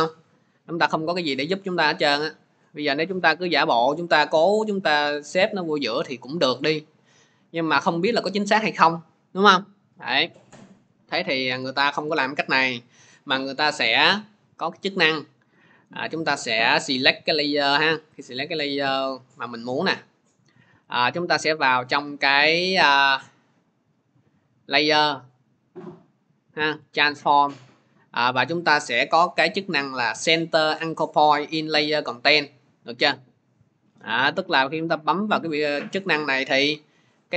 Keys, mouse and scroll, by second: 1.7-2.9 drag, 6.4-13.6 drag, 11.1 ctrl+z, 13.8 ctrl+z, 16.2 click, 17.0 click, 23.5 click, 26.8-28.5 drag, 35.1-37.3 drag.